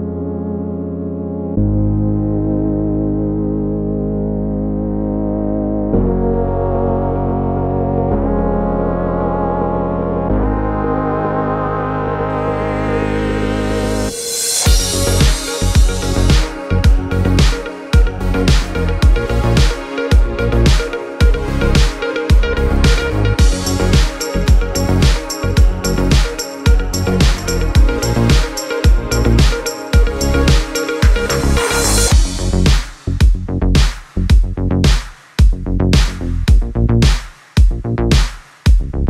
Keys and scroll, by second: 36.5 v.